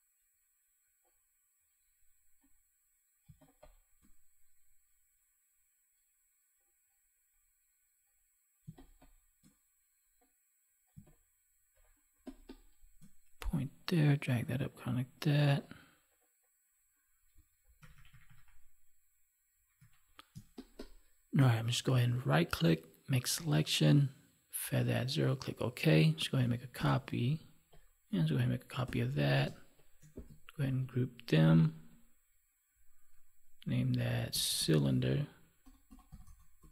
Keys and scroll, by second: 3.1 space, 8.6 space, 10.8 space, 17.7 ctrl+-, 19.7 ctrl+=, 26.7 ctrl+j, 28.8 ctrl+j, 30.6 ctrl+g.